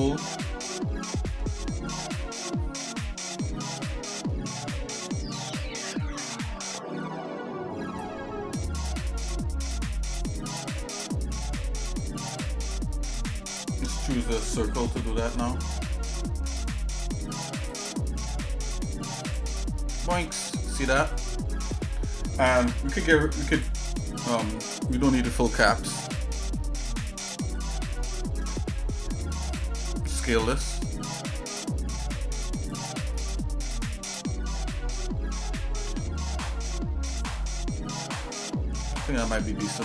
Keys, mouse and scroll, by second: 1.2 middle click, 3.7 middle click, 4.7 middle click, 5.4 shift+middle click, 8.0-10.4 drag, 12.3 click, 14.3 click, 15.4 middle click, 16.2 middle click, 17.7 click, 20.0 middle click, 20.5-21.6 shift+middle drag, 23.7 click, 24.1-25.8 shift+middle drag, 26.1 middle click, 26.6 middle click, 27.6 middle click, 28.0 scroll down 2, 28.5 shift+middle click, 29.5 click, 30.4 s, 33.1 middle click, 33.8 middle click, 34.4-35.5 scroll up 5, 35.8 s, 37.5 middle click, 37.9-38.4 scroll down 1, 38.4 scroll down 3, 38.5 middle click, 39.0-39.8 scroll up 6.